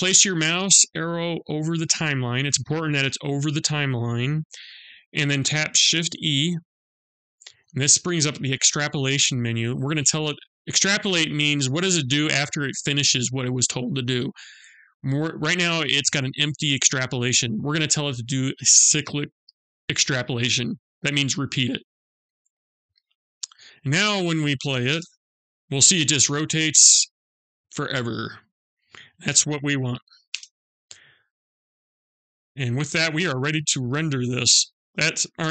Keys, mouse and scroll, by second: 6.4 shift+e, 24.5 space, 29.9 space, 31.1 click, 33.9 click.